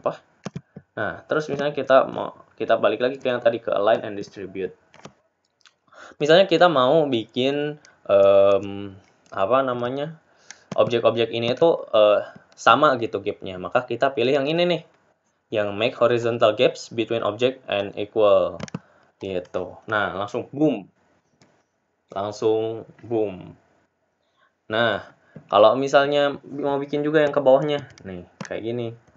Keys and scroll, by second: 0.0 ctrl+v, 0.0 Delete.